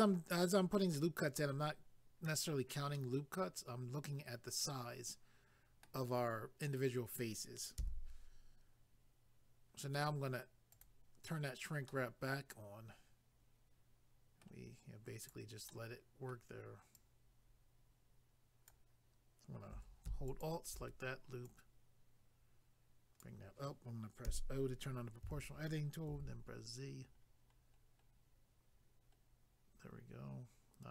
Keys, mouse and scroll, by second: 2.9 scroll up 1, 4.3 middle click, 7.8 a, 10.7 click, 10.8 click, 11.9 middle click, 15.2 click, 15.3 click, 15.7 middle click, 16.9 click, 20.3 alt+click, 20.4 alt+click, 21.4 click, 24.2 o, 27.2-28.5 scroll down 1, 30.4-30.9 scroll up 1.